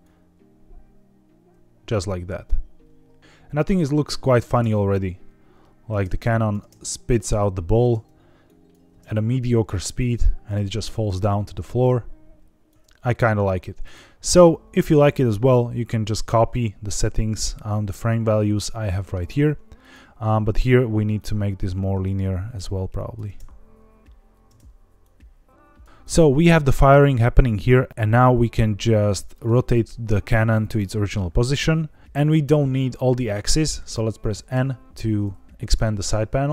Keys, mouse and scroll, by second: 1.5 space, 3.1 space, 3.2 middle click, 3.2 scroll up 3, 3.7-4.3 drag, 4.5 space, 5.0 scroll up 2, 5.9 space, 6.2 drag, 6.5 space, 7.7 space, 8.4 click, 8.8 space, 9.8 scroll down 1, 12.6 click, 12.7 space, 13.7 click, 14.2 scroll up 3, 14.9 shift+middle click, 17.0 scroll down 4, 19.7 click, 20.1-21.1 scroll up 4, 21.1 click, 22.9 click, 23.2 space, 24.4 space, 24.9 click, 25.9-29.3 drag, 34.4 n.